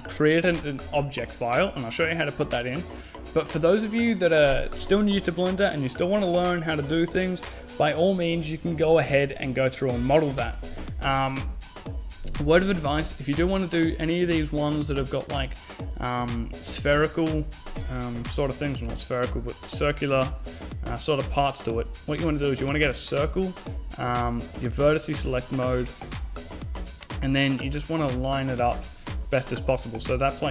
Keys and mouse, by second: 18.1 shift+a, 22.5 Tab, 23.8 click, 24.6 Tab, 25.4 g, 28.6 Tab, 29.1 a, 29.8 b.